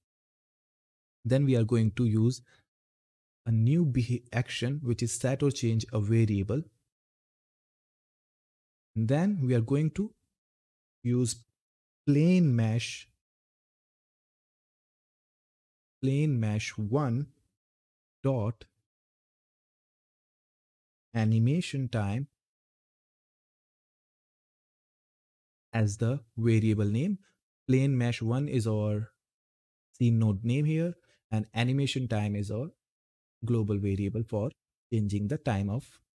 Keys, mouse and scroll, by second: 7.7 click, 11.1-12.2 typing, 15.0-16.3 typing, 20.7-21.0 typing, 22.3-24.0 typing.